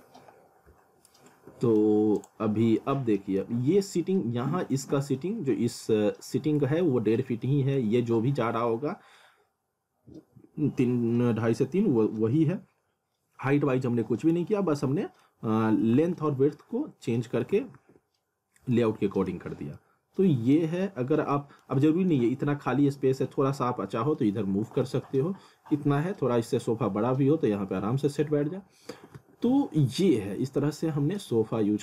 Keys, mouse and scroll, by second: 0.2 scroll down 1, 1.1 alt+middle click, 2.2 click, 2.6 scroll up 1, 2.8 middle click, 3.5-4.3 scroll up 1, 7.5 middle click, 11.0-12.8 scroll down 1, 14.6 alt+middle click, 16.0 w, 17.5 w, 18.5 scroll down 1, 18.7 middle click, 19.5 scroll down 1, 19.8 middle click, 20.8-21.1 scroll up 1, 21.3 middle click, 21.9 middle click, 24.7 w, 28.5 scroll down 1, 28.9 w, 29.6 scroll down 1, 30.0 alt+middle click, 30.8-31.1 scroll up 1, 31.2 alt+middle click.